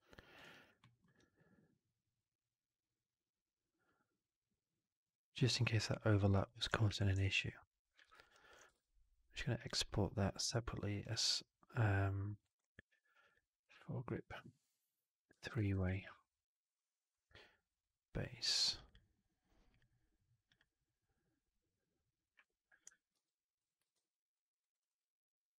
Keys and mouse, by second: 0.3 alt+right click, 0.5 alt+right click, 0.7 alt+middle click, 1.0-5.7 alt+drag, 5.7 alt+right click, 6.3 alt+click, 6.7 4, 7.1 alt+right drag, 7.2-7.8 alt+drag, 8.1 alt+right drag, 8.3 alt+drag, 8.6 shift+Tab, 23.0 ctrl+s, 23.8 alt+q, 24.2 alt+click, 24.5 alt+right drag, 24.7 alt+click.